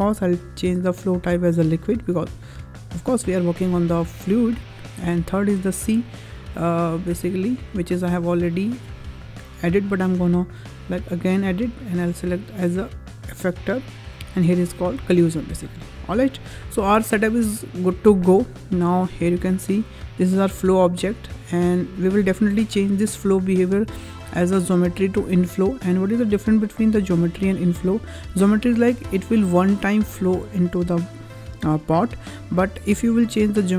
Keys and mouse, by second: 0.3-1.7 drag, 4.1 shift+middle drag, 8.8-11.1 drag, 12.1-13.3 drag, 16.1 shift+middle click, 23.4-28.6 drag, 33.1-33.7 drag.